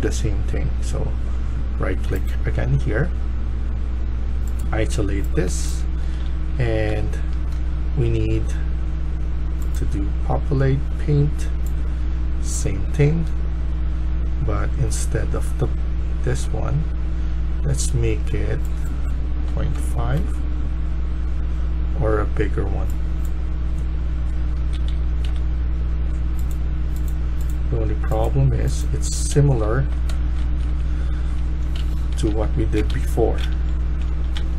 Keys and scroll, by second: 4.9-6.8 typing, 19.3 typing, 20.1 Return, 22.5 typing, 23.9-25.3 typing, 28.8-31.0 typing, 31.7 ctrl+z, 32.2 ctrl+z, 33.5 ctrl+z.